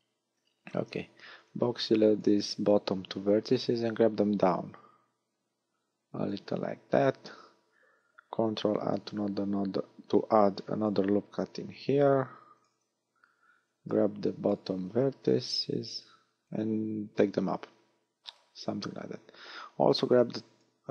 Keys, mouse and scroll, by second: 1.4 b, 4.0 click, 7.2 a, 8.8 ctrl+r, 12.6 click, 13.6 a, 14.7 b, 16.4 click, 19.1 a, 20.0 v.